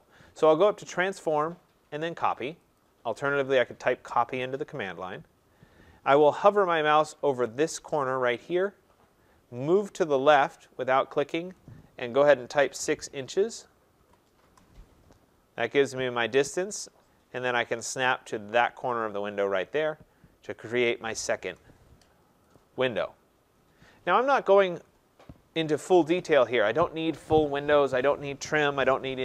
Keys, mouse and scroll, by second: 1.2 click, 2.8 click, 6.1-6.6 scroll, 12.5 6, 14.0-14.5 typing, 19.0 click, 19.7 middle click, 19.8-20.4 scroll, 21.4 Return, 22.6 click, 23.8-24.9 scroll.